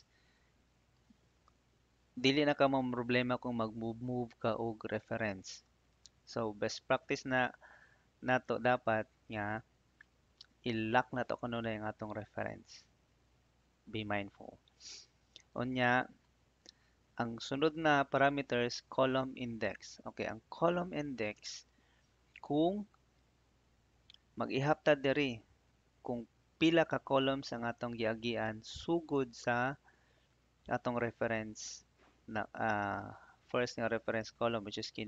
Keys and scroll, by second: 31.8 BackSpace.